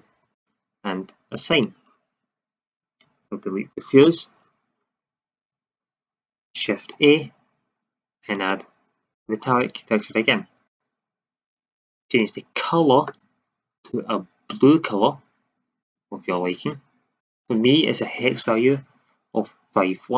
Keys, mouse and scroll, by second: 4.0 Delete, 5.8 shift+z, 6.9 shift+a.